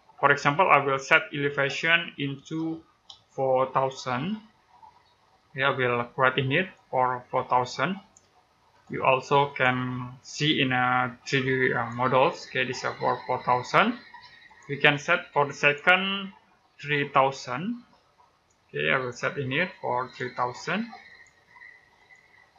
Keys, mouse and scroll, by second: 2.9 typing, 4.0-4.5 typing, 6.5 click, 14.3 click, 16.6-17.6 typing, 19.9 click.